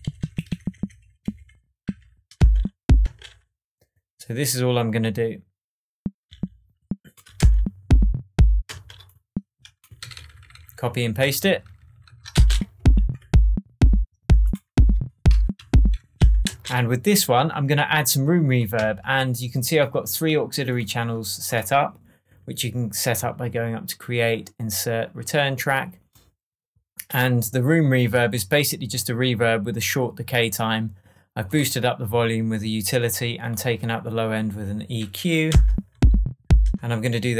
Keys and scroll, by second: 1.8 Down, 2.3 space, 7.3 alt+space, 8.3 space, 8.6 space, 9.9 super+d, 12.3 super+space, 12.9 shift+Tab, 16.4 super+space, 16.9 space, 18.7 Tab, 35.4 space, 36.7 space.